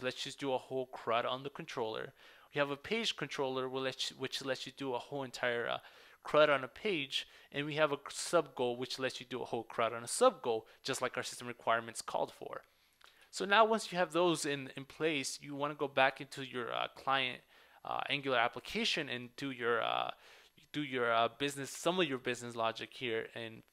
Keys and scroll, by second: 13.2 super+w.